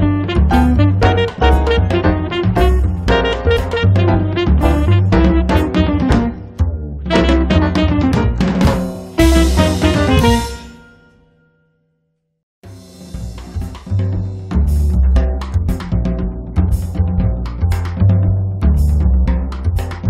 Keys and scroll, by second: 8.3 Escape.